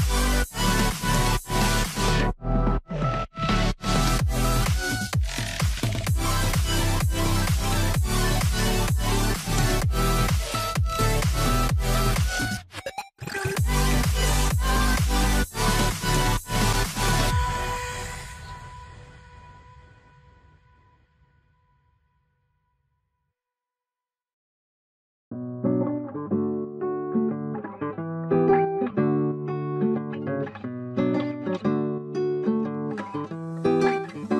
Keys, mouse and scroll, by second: 0.0-0.5 typing, 2.0 double click, 6.8 middle click, 8.9 ctrl+z, 9.6 ctrl+z, 9.8 s, 11.3 ctrl+z, 11.6-12.4 scroll up 1, 12.4 double click, 12.8 ctrl+z, 13.0 space, 13.5 r, 14.8 scroll, 14.9 alt+middle click, 15.6-16.1 scroll up 1, 16.1 w, 19.4 scroll down 1, 19.5 alt+middle click, 20.1-20.7 scroll, 20.7 Delete, 21.2 z, 21.4 scroll down 1, 22.8-23.1 scroll up 1, 23.2 ctrl+s, 27.1 middle click, 27.3 scroll up 1, 27.7 scroll, 27.9 scroll up 1, 28.1 middle click, 28.2 scroll down 1, 29.5 shift+click, 30.6 e, 31.9 a, 33.9 middle click, 34.0 w.